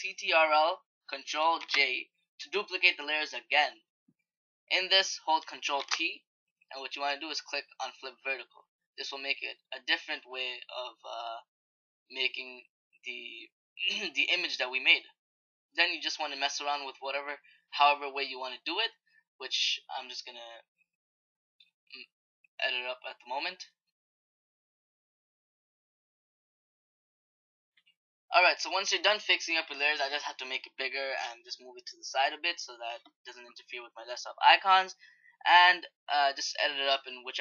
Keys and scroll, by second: 1.4 ctrl+j, 5.5 ctrl+t.